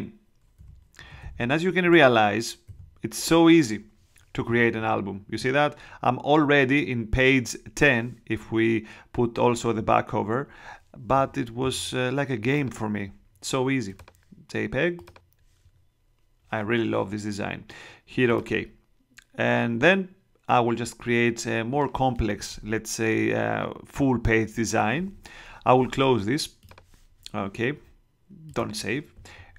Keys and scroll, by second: 0.5 8, 0.9 Right, 1.8 BackSpace, 2.6 9.